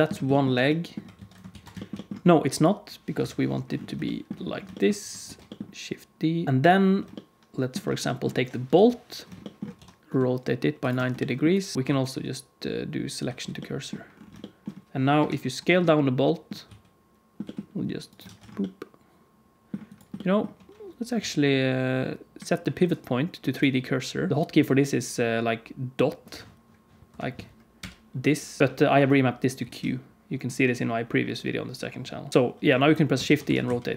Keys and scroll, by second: 1.1 alt+a, 1.5 ctrl+s, 3.1 KP_1, 5.2 shift+d, 6.4 alt+a, 6.4 ctrl+s, 8.7 KP_1, 9.7 r, 11.7 g, 11.8 shift+s, 15.1 KP_Decimal, 16.6 s, 17.3 g, 18.2 alt+a, 21.1 q, 26.9 F3, 27.0 F3, 29.7 q, 31.9 q, 32.3 alt+a, 33.2 shift+d.